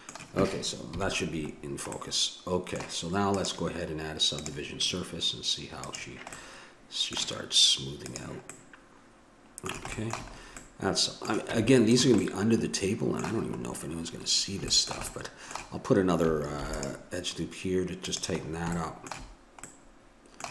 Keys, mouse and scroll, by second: 0.9 KP_Decimal, 1.6-3.3 middle drag, 3.3-5.5 drag, 5.8 click, 6.3-7.8 middle drag, 8.0 click, 8.5-10.0 middle drag, 11.5 Tab, 14.1-16.6 middle drag, 16.6 ctrl+r, 17.1 click, 18.4 middle click.